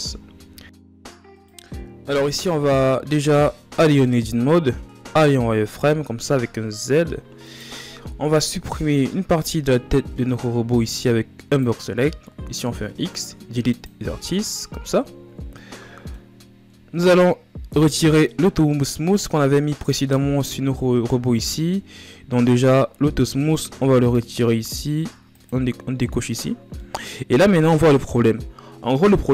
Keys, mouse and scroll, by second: 0.5 scroll up 1, 0.6 a, 1.0-2.6 right drag, 2.6-3.5 ctrl+scroll down 2, 3.5 Tab, 4.7 a, 5.4 a, 6.5 z, 7.1 right click, 11.2 b, 14.0 z, 14.8-15.2 ctrl+scroll up 1, 15.2 middle click, 16.0-17.2 ctrl+scroll up 2, 18.5-25.0 middle drag, 25.0-26.4 drag, 26.4-29.3 middle drag.